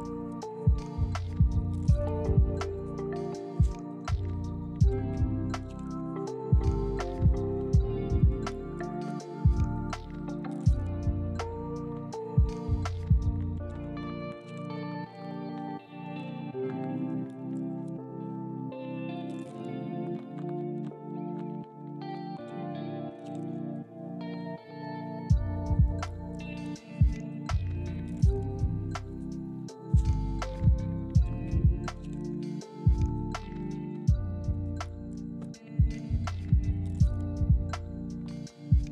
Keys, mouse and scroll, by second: 0.1 middle click, 3.5 middle click, 4.4-4.8 scroll down 1, 4.8 middle click, 5.5 KP_7, 5.9-7.0 scroll up 1, 7.0 s, 7.1 y, 8.8 middle click, 9.7 scroll down 1, 9.9 middle click, 10.6 z, 11.2 middle click, 11.9 ctrl+click, 12.3 f, 13.0 ctrl+click, 13.2 f, 13.6 ctrl+click, 13.7 f, 13.8 middle click, 14.3 ctrl+click, 14.4 f, 15.1 ctrl+click, 15.6 ctrl+click, 15.8-18.3 typing, 16.2 ctrl+click, 16.8 ctrl+click, 17.0 middle click, 17.6 ctrl+click, 18.2 ctrl+click, 18.4 middle click, 18.9 ctrl+click, 19.1 ctrl+f, 19.7 ctrl+click, 19.8 ctrl+f, 19.9 middle click, 20.7 ctrl+click, 20.8 f, 21.1 ctrl+click, 21.7 ctrl+click, 21.8 ctrl+f, 21.9 middle click, 22.7 ctrl+click, 22.8 ctrl+f, 23.2 ctrl+click, 23.3 ctrl+f, 23.4 middle click, 24.0 ctrl+click, 24.2 ctrl+f, 24.4 ctrl+click, 24.6 ctrl+f, 25.4 ctrl+click, 25.4 ctrl+click, 25.6 middle click, 26.5 ctrl+click, 27.0 ctrl+click, 27.1 ctrl+click, 27.3 middle click, 28.9-29.7 scroll up 1, 30.6 ctrl+click, 30.7 middle click, 31.2 ctrl+click, 31.7 s, 32.7 middle click, 34.5 ctrl+click, 35.3 ctrl+click, 36.1 middle click, 36.5 shift+click, 37.6 s.